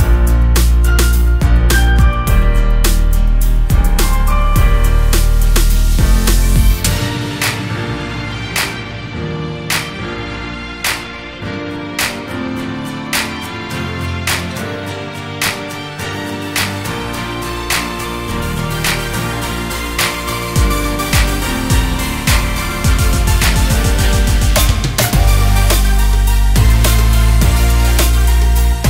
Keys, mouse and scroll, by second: 0.4 s, 1.4-2.0 scroll up 2, 2.0 click, 2.7 click, 2.8 click, 4.0 click, 4.4 ctrl+z, 4.6 ctrl+z, 6.3 click, 7.0 click, 8.2 click, 9.3 click, 11.4 click, 13.0 click, 13.7-14.2 scroll up 2, 14.2 click, 14.6-15.1 scroll up 2, 15.1 click, 15.4-16.2 scroll down 2, 16.2-16.8 drag, 17.8 click, 19.3 click, 20.0 click, 21.7 click, 21.9-22.4 scroll down 1, 22.4 click, 22.7 scroll down 1, 23.7 click, 26.4 click, 27.2 click.